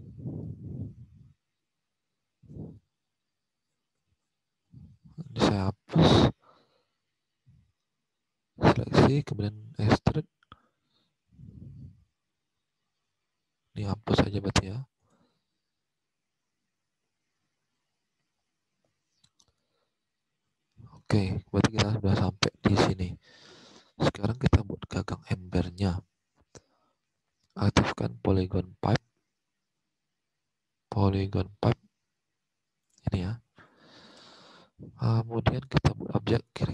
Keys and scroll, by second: 3.0 Down, 3.8 Home, 4.6 shift+End, 9.6 Delete, 15.7 Delete, 22.5 ctrl+s, 28.6 alt+Tab, 33.6 alt+Tab, 36.0 alt+Tab.